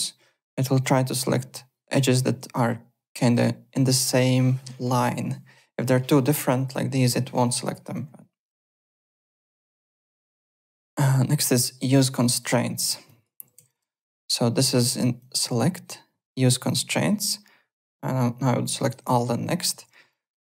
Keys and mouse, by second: 6.5 click, 7.6 click, 8.6 alt+click, 8.9 alt+middle click, 9.1 alt+click, 9.4 alt+Tab, 10.2 alt+click, 12.4 click, 13.0 click, 13.8 3, 13.8 click, 13.9 click, 15.1 click, 16.6 click, 18.7 click, 19.4 click, 20.1 alt+middle click, 20.4 alt+right click.